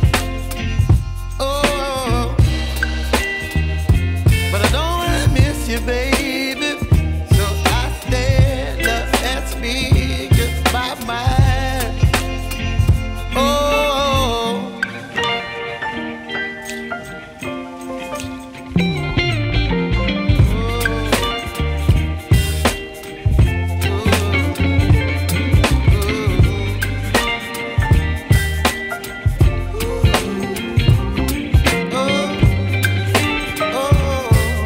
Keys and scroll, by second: 6.5 shift+Return, 15.4 shift+super+i, 24.9 v, 28.8 super+t, 29.9 alt+super+t.